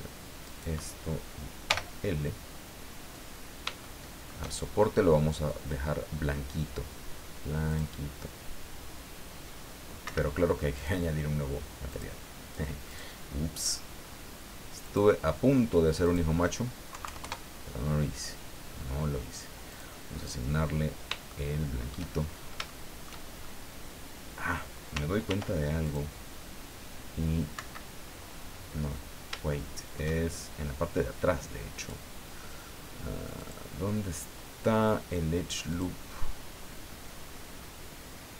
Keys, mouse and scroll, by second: 0.4 right click, 1.7 l, 3.3-3.6 scroll down 2, 3.8 shift+middle click, 7.7 click, 10.0 Escape, 10.8 click, 11.9 click, 12.9 click, 14.8 click, 16.0 click, 16.9 KP_Decimal, 17.0 KP_2, 17.2 KP_Enter, 19.7 click, 21.3 shift+middle click, 22.2-22.6 shift+scroll up 4, 22.7 shift+middle click, 23.4 shift+scroll up 1, 25.3 ctrl+r, 25.9 ctrl+click, 27.6 Escape, 28.8-29.1 scroll up 2, 29.5 shift+middle click, 31.8 click, 33.4 click, 35.7 click, 37.2-37.8 scroll up 1.